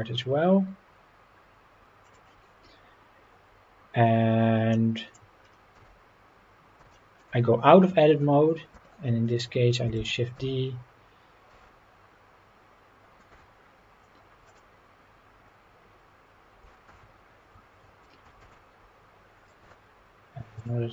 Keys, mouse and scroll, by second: 2.0 click, 4.7 middle click, 5.4 scroll down 1, 5.7 Tab, 6.9 shift+middle drag, 8.7 KP_7, 10.0 shift+d, 10.4 x, 11.5 z, 14.5 click, 16.6 x, 18.4 shift+d, 19.6 y, 20.6 click.